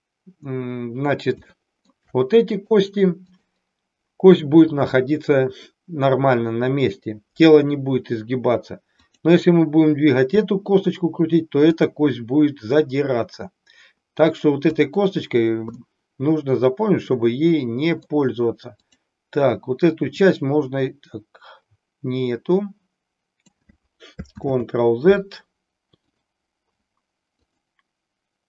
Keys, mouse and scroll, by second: 1.5 shift+middle click, 2.5 click, 3.3 click, 8.9 click, 11.6 click, 14.6 click, 15.9-18.2 middle drag, 18.8 click, 20.0-23.6 drag, 24.3 ctrl+z, 26.0 click, 27.3 click.